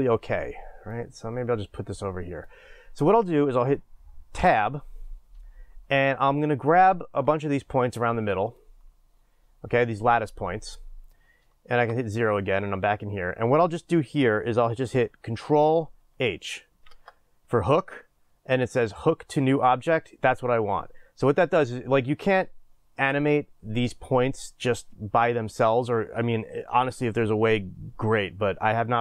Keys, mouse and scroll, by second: 1.0-8.6 drag, 4.4 Tab, 11.7 KP_0.